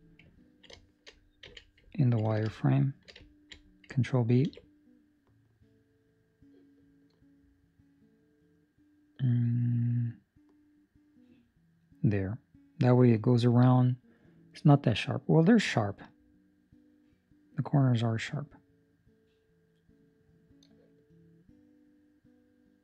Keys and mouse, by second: 0.4 ctrl+middle click, 0.7 shift+middle click, 1.4 z, 1.9 ctrl+middle click, 2.7 ctrl+middle click, 3.2 ctrl+middle click, 4.4 ctrl+b.